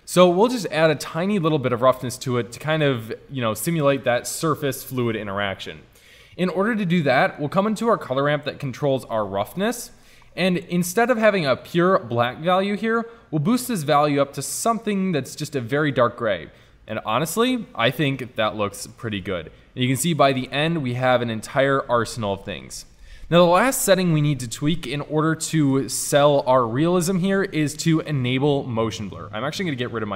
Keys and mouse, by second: 0.6-2.1 middle drag, 2.1 middle click, 6.6 middle click, 7.2 middle click, 8.2-9.9 drag, 9.9-11.7 middle drag, 11.7 click, 12.1-14.5 drag, 16.5 middle click, 18.3-20.2 middle drag, 21.1-23.0 middle drag, 25.4-29.7 middle drag, 29.7 click.